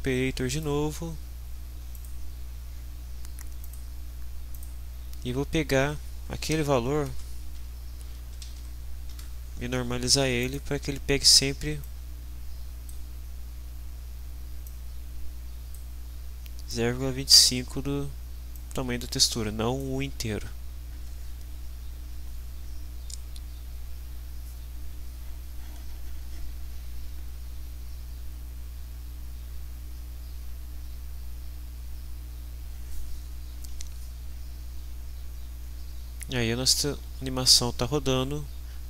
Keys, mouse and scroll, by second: 0.5 click, 1.9 click, 3.7 click, 4.5 click, 6.4 Delete, 7.1-9.1 typing, 9.1 Return, 10.4 click, 11.8-13.1 drag, 14.7-15.9 drag, 16.7-17.5 drag, 18.5-20.0 drag.